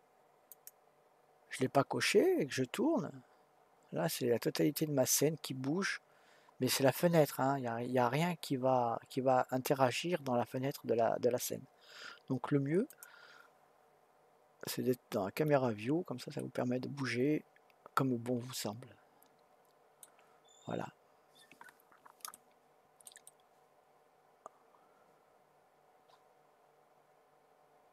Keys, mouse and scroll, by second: 0.5 click, 2.7-3.1 scroll down 2, 3.1-4.0 scroll up 5, 4.0-4.5 scroll down 2, 4.5-4.9 scroll up 4, 4.9-5.4 scroll down 3, 5.4-5.7 scroll up 4, 5.7-6.1 scroll down 3, 6.1-8.5 scroll up 1, 12.9 click, 16.4-19.4 middle drag, 20.5-20.9 scroll up 2, 20.9-22.3 scroll down 1, 22.3-26.3 shift+middle drag.